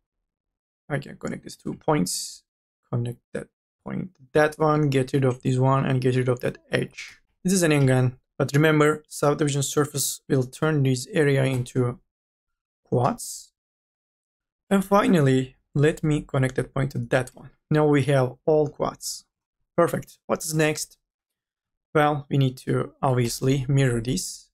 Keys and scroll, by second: 0.1 e, 6.6-7.7 typing, 13.3-18.6 typing, 20.7 4, 23.3 3.